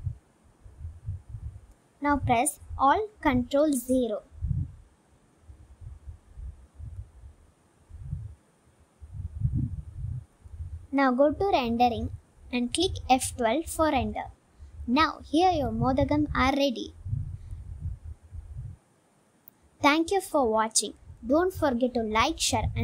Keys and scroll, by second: 2.7 shift+a, 6.4 ctrl+alt+0, 7.3 g, 7.5 x, 8.2 g, 8.4 z, 10.6 g, 10.8 x, 14.5 F12.